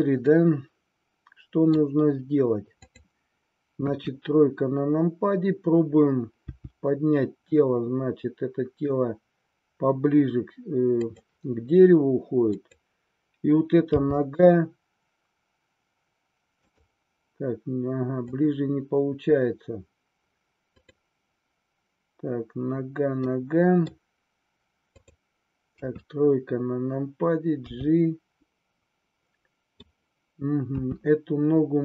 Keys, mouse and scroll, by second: 0.4-1.7 middle drag, 4.0 KP_3, 6.6 g, 11.1 click, 14.1 g, 16.7 click, 18.1 click, 23.2-24.0 middle drag, 26.1 KP_3, 27.7 g, 28.5-29.8 middle drag, 30.7 r.